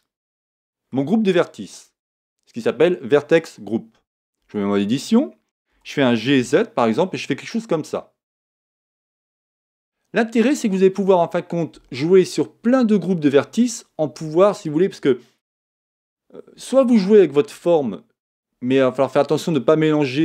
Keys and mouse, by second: 0.3-4.4 middle drag, 4.4 Tab, 5.7 g, 8.5 click, 9.3 Tab.